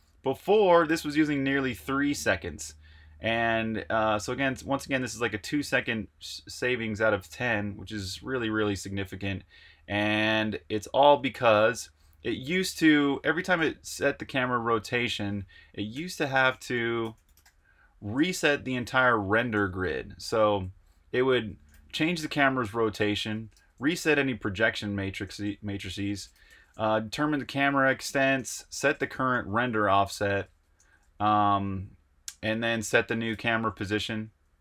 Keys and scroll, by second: 9.8 super+Tab, 13.7 super+Tab, 15.6-17.9 typing, 18.1 Tab, 18.4 Return, 19.5-30.8 typing, 25.0 Escape, 32.4-34.6 typing.